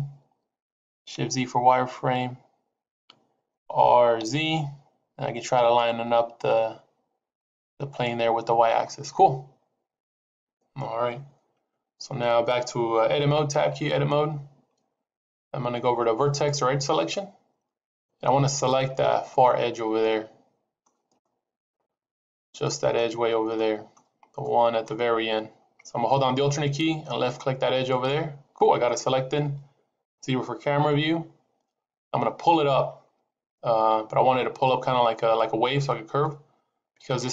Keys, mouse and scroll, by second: 1.9 shift+z, 3.5 r, 13.6 Tab, 16.3 click, 16.9 click, 17.5 scroll up 1, 19.6 scroll down 1, 19.9 middle click, 19.9 scroll up 2, 21.1 shift+middle click, 22.5 middle click, 23.1 scroll up 3, 23.4 middle click, 24.3 shift+middle click, 27.8 alt+click, 28.7 scroll down 4, 29.9 KP_0, 31.1 scroll down 2.